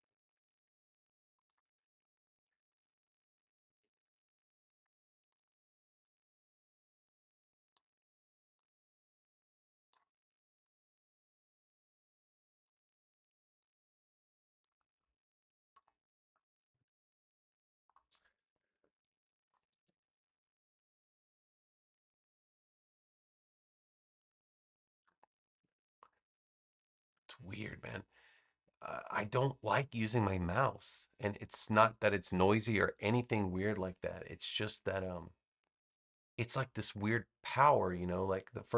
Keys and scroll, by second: 19.6 super+=, 25.5 BackSpace.